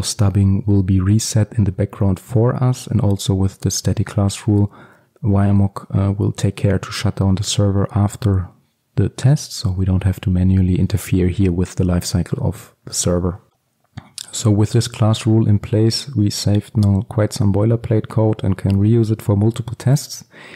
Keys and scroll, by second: 13.5 ctrl+z.